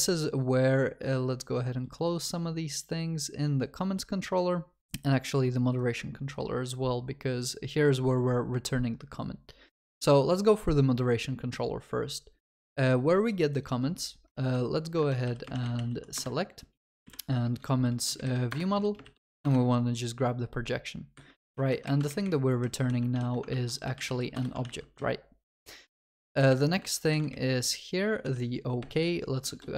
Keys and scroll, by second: 14.5 Escape, 16.2 Return, 23.5 ctrl+w, 24.3 Return.